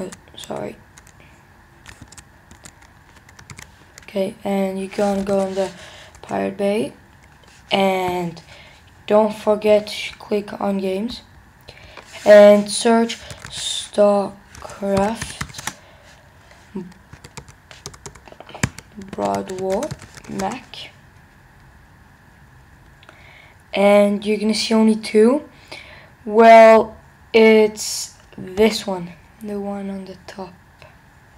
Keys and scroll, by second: 3.5 super+t, 6.1 Return, 20.2 typing, 20.4 Return.